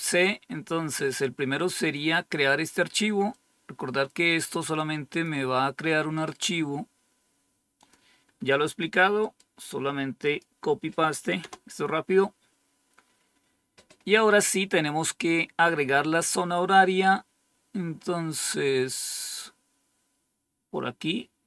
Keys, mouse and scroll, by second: 0.1-0.9 scroll down 1, 0.9-1.5 scroll down 1, 1.5-3.2 scroll down 1, 3.2-5.2 drag, 7.7 click, 10.2 click, 11.3 Return, 13.2-14.4 scroll down 2, 14.4-16.0 scroll down 1, 16.4-17.5 scroll down 2, 17.5-21.4 scroll down 1.